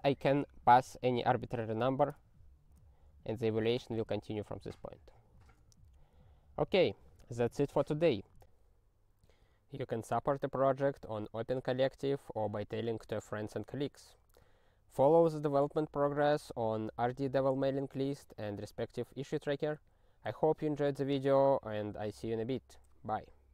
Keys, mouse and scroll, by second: 0.0-0.2 typing, 5.4 ctrl+b, 6.5 scroll down 3, 7.3 scroll up 1.